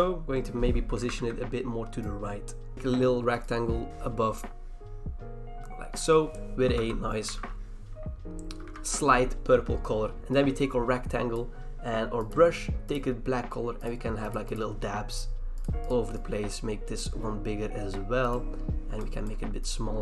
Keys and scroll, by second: 1.1 ctrl+z, 6.7 alt+BackSpace, 7.3 ctrl+d, 8.6 v, 10.2 ctrl+e.